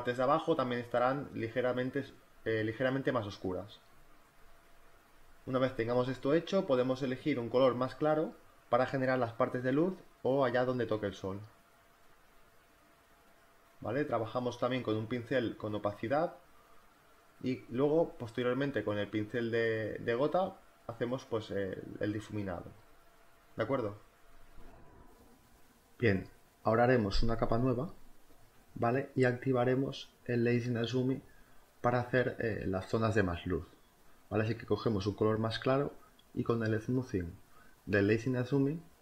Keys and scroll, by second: 0.0-1.2 typing, 2.3 e, 3.3 b, 3.8 space, 4.0 z, 5.8 b, 13.6 ], 14.0 [, 17.7-18.6 typing, 20.0 ], 20.1 [, 20.8 ], 23.6 ctrl+z, 24.5-25.5 typing, 27.5 z, 29.4 b, 35.8 [.